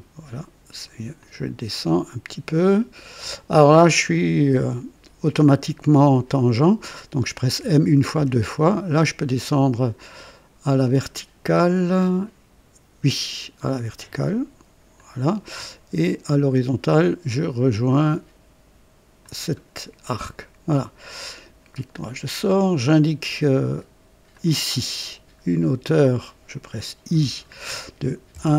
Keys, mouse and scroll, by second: 1.2 click, 7.6-8.2 typing, 14.9 click, 19.2 click, 20.2 right click, 21.1 right click, 24.3 click, 27.1 i, 28.3 KP_1.